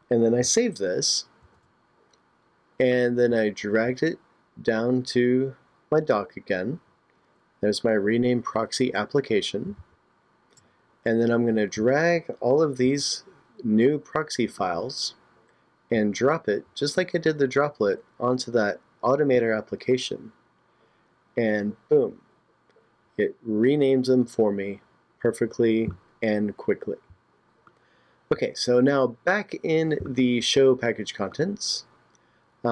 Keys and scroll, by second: 1.5 super+s, 9.8 super+Tab, 12.8 super+a.